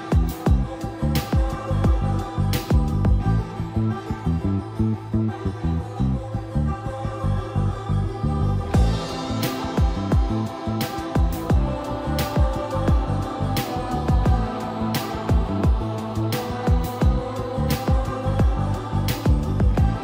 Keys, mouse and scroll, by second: 1.3 c, 2.3 click, 3.3-5.0 typing, 13.9-15.1 scroll up 1, 15.1 middle click, 15.3-16.0 scroll up 1, 16.0 o, 17.3 4, 17.8 click, 18.7-20.0 typing, 19.8 click.